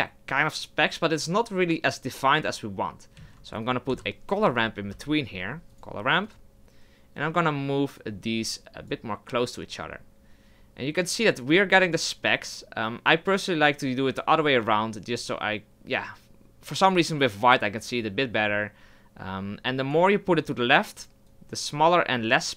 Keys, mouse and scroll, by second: 8.1-15.3 drag, 17.7-22.5 drag.